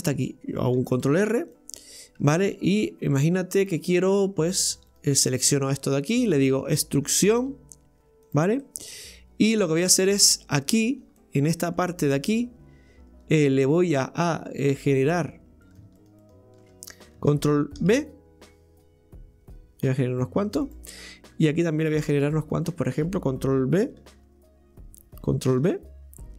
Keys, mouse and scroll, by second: 1.0 ctrl+r, 3.6 click, 4.6 right click, 4.9 alt+shift+right click, 5.2 alt+shift+right click, 5.7 middle click, 6.3-6.9 scroll down 2, 6.9 middle click, 8.6 middle click, 9.5 Tab, 10.0-10.8 scroll up 4, 11.0 scroll down 2, 11.2-11.7 middle drag, 11.7 Tab, 12.2 right click, 13.6 click, 15.7 right click, 16.0 alt+shift+right click, 16.2 alt+shift+right click, 17.9 ctrl+b, 20.6-22.1 drag, 22.1 right click, 22.4 alt+shift+right click, 22.6 alt+shift+right click, 25.6 ctrl+b.